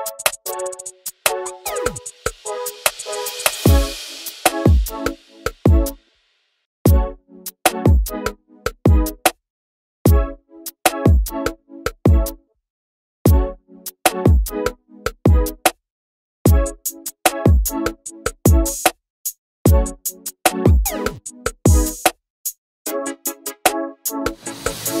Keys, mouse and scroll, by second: 0.9-1.3 scroll up 1, 1.3 click, 1.6 n, 2.2-4.0 drag, 4.1 scroll up 1, 6.2-9.6 drag, 15.3 click, 15.9-16.4 scroll down 5, 16.4 /, 16.7 scroll down 1, 16.9 middle click, 17.0 scroll up 3, 17.1 middle click, 17.6 scroll down 1, 17.6 shift+middle click, 17.7-18.3 scroll up 1, 18.3 scroll down 1, 18.4 shift+middle click, 18.5 scroll up 1, 18.6 middle click, 19.2 scroll down 1, 19.2 scroll up 1, 19.3 middle click, 19.5 scroll down 1, 19.5-23.1 shift+middle drag, 23.1-25.0 drag.